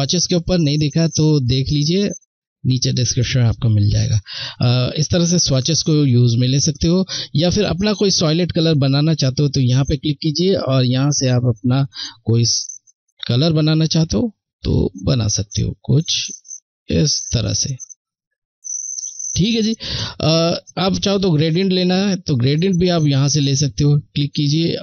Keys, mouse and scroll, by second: 1.8 click, 7.6 click, 23.0 click.